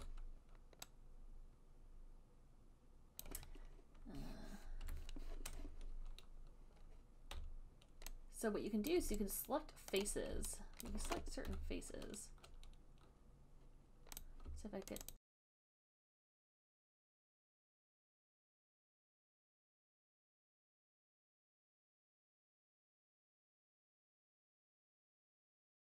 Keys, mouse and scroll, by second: 0.1 w, 3.5 click, 5.0 Delete, 9.2 alt+click, 10.3 right click, 11.1 alt+click, 11.8 b, 14.5 click, 15.2 shift+click, 15.3 alt+click, 15.4 >, 15.6 >, 16.1 alt+click, 16.2 alt+right click, 16.2 alt+middle click, 16.3 alt+click, 16.4 q, 16.5 alt+click, 16.6 shift+click, 16.7 alt+click, 16.8 shift+click, 16.9 shift+click, 16.9 shift+click, 17.3 alt+click, 17.4 b, 17.8 alt+click, 18.0 click, 18.1 alt+click, 18.2 alt+click, 18.2 alt+right click, 19.0 click, 19.1 alt+right click, 19.3 alt+right click, 19.4 w, 20.0 click, 20.6 alt+click, 21.0 alt+right click, 21.3 alt+click, 21.6 alt+right click, 21.6 click, 21.7 alt+right click, 22.3 click, 22.4 alt+right click, 22.4 r, 22.7 click, 23.1 click, 23.1 alt+click, 23.4 right click, 23.4 click, 23.6 click, 23.7 alt+click, 24.0 right click, 24.1 alt+click, 24.3 right click, 24.4 alt+click, 24.4 alt+click, 24.5 click, 24.7 shift+click, 24.8 click, 25.0 click, 25.3 shift+click, 25.4 shift+click, 25.5 alt+click, 25.5 shift+click, 25.7 alt+click, 25.9 b.